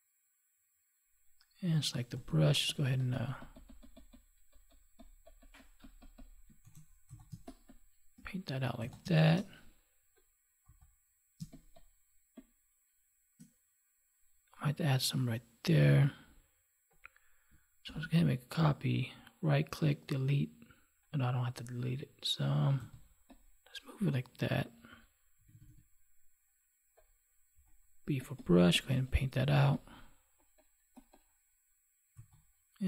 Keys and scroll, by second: 6.6 ctrl+s, 7.3 space, 9.0 space, 11.3 space, 17.8 ctrl+j.